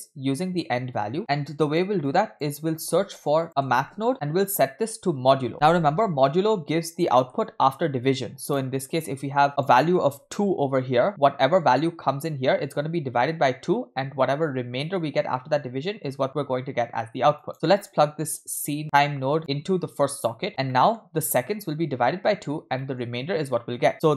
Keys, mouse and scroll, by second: 1.2 middle click, 1.2 scroll down 2, 1.5-1.9 drag, 2.0-2.4 drag, 2.8 shift+a, 4.5-5.5 drag, 6.7-7.1 scroll up 2, 7.2 middle click, 7.4-8.0 scroll up 1, 8.0-8.6 drag, 9.6 click, 16.3-17.5 drag, 17.5 scroll down 2, 17.6 middle click, 18.5 click, 19.4-20.4 drag, 20.5 scroll up 2, 20.7 middle click, 22.8-23.1 middle drag, 23.2-24.0 scroll up 1.